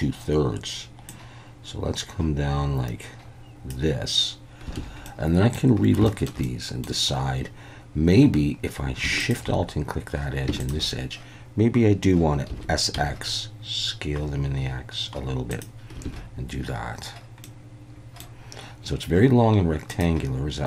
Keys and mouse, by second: 1.1-3.7 drag, 4.8 alt+a, 5.1 middle click, 6.0 shift+middle click, 6.4 middle click, 9.2 alt+shift+click, 10.6 alt+shift+click, 12.5 s, 12.9 x, 15.5 click, 16.0 alt+a, 17.4 middle click.